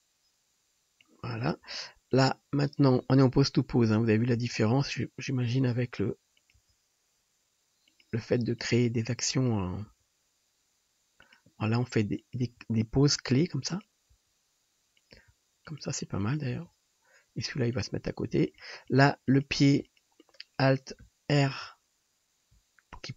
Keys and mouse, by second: 2.3-17.6 drag, 3.8 KP_1, 4.3 KP_3, 5.7 r, 6.6 g, 8.6 middle click, 8.6 right click, 9.9 g, 11.8 r, 12.5 g, 14.2 r, 15.2 g, 16.7 g, 18.3 r, 18.9 drag, 18.9 right drag, 19.3 click, 19.3 right click, 19.9 shift+click, 19.9 shift+right click, 23.0 click.